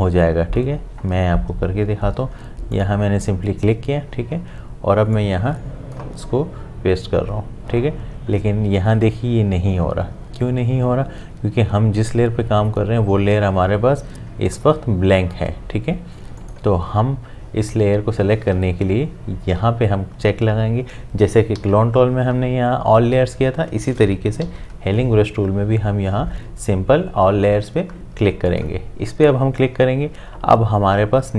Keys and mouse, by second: 2.7 click, 5.1-8.3 drag, 14.5 click, 21.6 s, 24.4 j, 28.5 click.